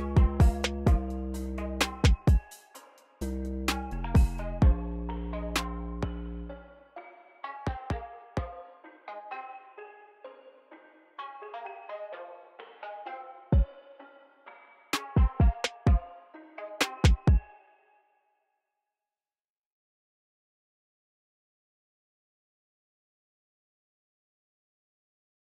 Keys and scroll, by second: 0.3 BackSpace, 3.9 ctrl+m, 5.5 ctrl+m, 7.9 ctrl+m, 11.6 ctrl+m, 14.9 ctrl+m, 17.2 space.